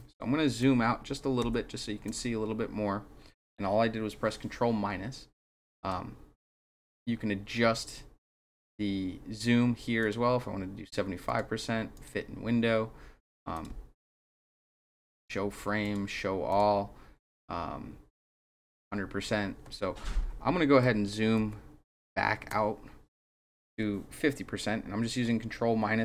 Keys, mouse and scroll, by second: 1.4 ctrl+-, 5.8 click, 10.0 click, 11.3 click, 11.9 click, 13.5 click, 15.1 click, 15.8 click, 16.5 click, 17.2 click, 18.7 click, 21.5 ctrl+-.